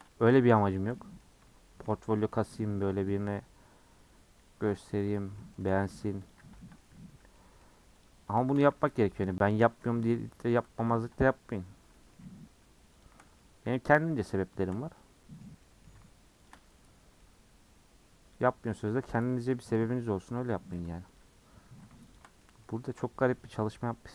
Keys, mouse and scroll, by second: 0.1 middle click, 0.8 alt+shift+click, 1.0-2.2 middle drag, 2.2 alt+shift+click, 2.9-5.0 middle drag, 5.4 middle click, 5.6 a, 6.8 middle click, 7.0 1, 7.3 middle click, 8.0 click, 8.7 g, 9.8 2, 10.5 alt+click, 10.9-13.0 middle drag, 13.0 alt+shift+click, 13.4-14.6 middle drag, 14.6 alt+shift+click, 14.9-16.5 middle drag, 16.5 alt+shift+click, 17.2-21.2 middle drag, 21.2 alt+click, 22.4 middle click, 23.1 scroll up 2, 24.0-24.1 scroll up 1.